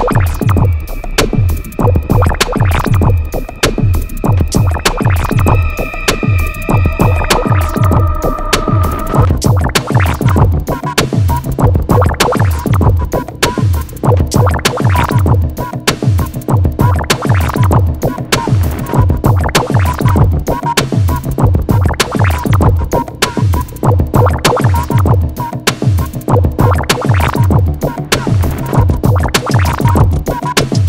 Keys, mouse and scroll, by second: 1.8 click, 3.7 right click, 6.5 click, 9.1 click, 17.8 KP_Subtract, 18.4 KP_1, 19.2 KP_Enter, 21.5 click, 22.2 right click, 23.1 click, 27.3 e, 29.2 click.